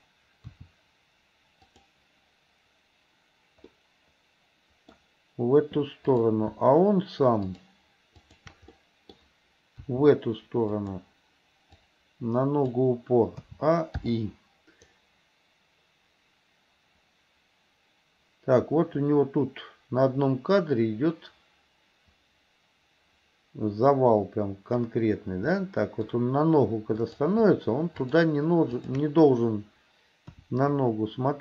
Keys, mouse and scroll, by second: 0.5 r, 3.8-5.0 middle drag, 6.1 click, 7.5 shift+click, 8.3 shift+click, 8.8 middle click, 9.9 r, 12.0 click, 13.5 a, 14.1 i, 15.0-24.9 drag, 25.5 middle click, 27.0 click, 28.1 shift+click, 28.9 shift+click, 30.3 KP_1.